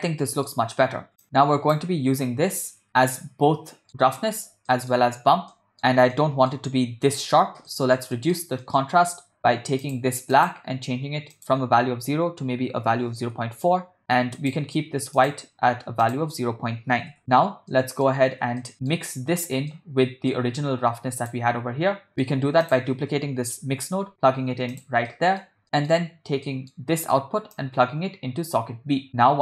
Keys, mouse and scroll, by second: 0.3 middle click, 1.2 click, 2.9-3.9 ctrl+middle drag, 4.7 middle click, 5.5 middle click, 6.2 middle click, 7.7 ctrl+middle click, 8.2 middle click, 8.6 ctrl+middle click, 9.8 click, 10.3 click, 14.4 click, 15.2 click, 17.7 middle click, 18.6 shift+middle click, 19.1 ctrl+middle click, 19.7 middle click, 21.3 click, 22.1 middle click, 22.7 click, 23.9 shift+d, 25.1 middle click, 25.6 middle click, 26.5 middle click, 27.6-29.4 drag.